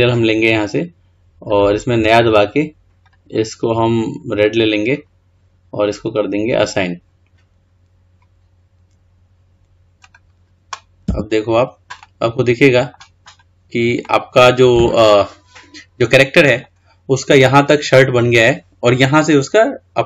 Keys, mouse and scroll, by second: 0.2-3.4 drag, 10.2-11.2 drag, 11.2 Tab, 12.2-13.5 middle drag, 13.5-13.9 drag, 14.3-19.4 middle drag.